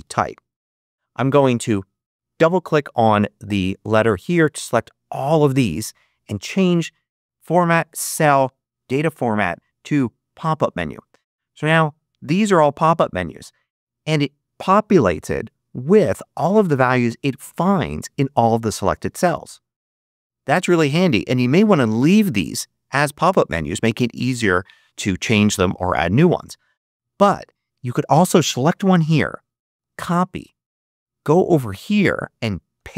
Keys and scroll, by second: 29.7 super+c, 32.6 super+v.